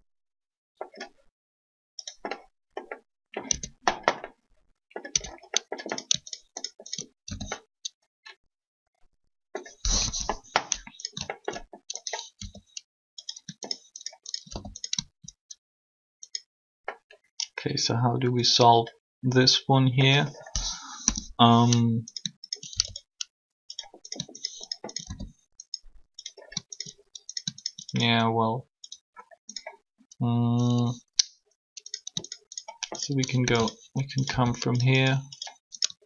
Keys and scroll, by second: 3.5 Tab, 5.1 Tab, 9.8 3, 12.3 shift+e, 20.8 3, 34.3 shift+r.